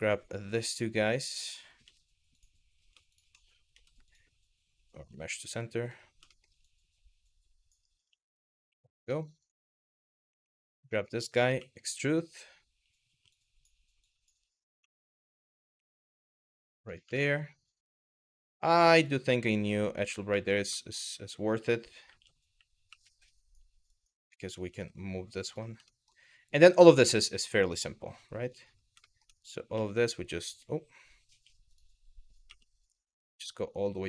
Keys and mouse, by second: 0.7 click, 1.4 m, 2.7 shift+click, 3.3 m, 6.0 shift+middle click, 8.3 w, 8.8 shift+middle click, 9.0 click, 9.9 2, 10.2 click, 10.6 shift+middle click, 11.2 e, 11.9 click, 12.9 click, 13.7 click, 14.4 g, 15.1 click, 15.4 g, 16.4 click, 16.8 shift+middle click, 18.6 click, 19.2 click, 20.0 shift+middle click, 21.7 1, 22.5 w, 23.0 click, 23.6 click, 24.3 g, 25.1 click, 25.5 shift+middle click, 26.8 shift+middle click, 28.7 shift+middle click, 29.4 e, 30.9 2, 33.8 click.